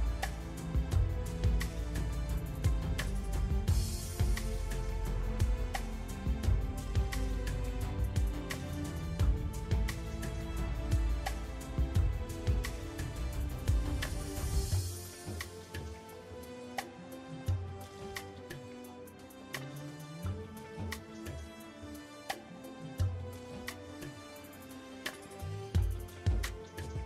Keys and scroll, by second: 10.0 Tab, 11.2 Tab, 20.4 Tab.